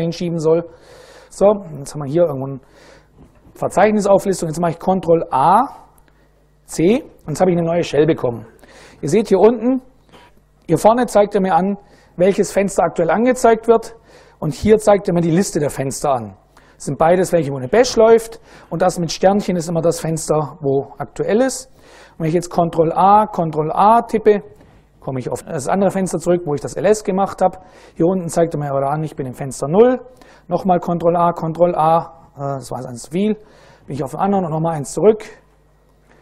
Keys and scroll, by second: 0.6-2.6 typing, 2.1 Return, 4.9 ctrl+a, 6.4 c, 22.3 ctrl+a, 23.0 ctrl+a, 30.4 ctrl+a, 30.6 ctrl+a, 31.1 ctrl+a, 34.1 ctrl+a.